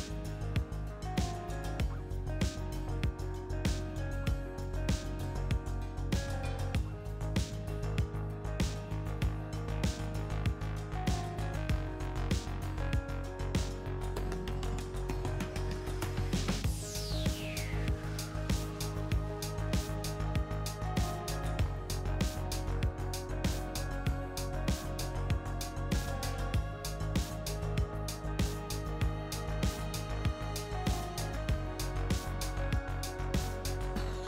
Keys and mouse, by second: 3.4-5.2 drag, 7.5-10.3 drag, 10.6-13.2 drag, 13.4 click, 14.7 middle click, 18.6 KP_3, 19.9 KP_1, 21.7 click, 22.9 middle click, 25.8 middle click, 27.2-28.7 middle drag, 28.7-34.2 drag.